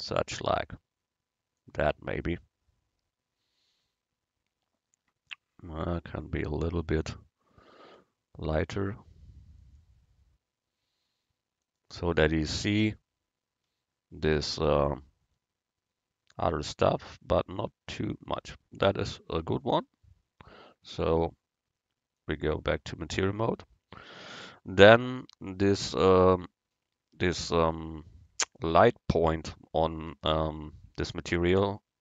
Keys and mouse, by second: 2.9-5.6 middle drag, 8.1-9.9 drag, 21.0-22.8 drag.